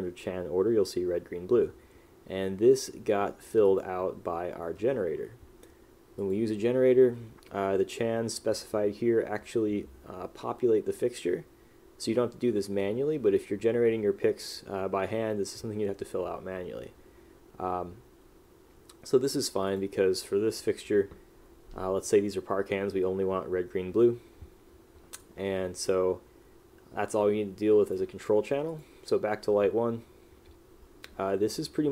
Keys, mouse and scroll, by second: 5.1 middle click, 25.3 click.